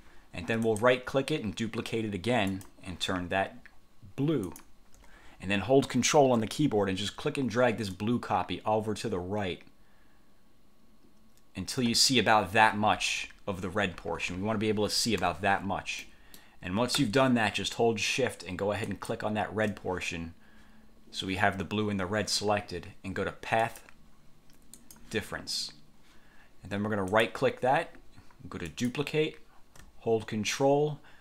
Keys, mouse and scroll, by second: 0.8 click, 2.6 click, 4.6 click, 8.0-12.0 ctrl+drag, 13.0-13.4 ctrl+scroll up 2, 15.3 1, 16.1 click, 19.0 shift+click, 23.8 click, 24.9 click, 27.2 click, 28.8 click.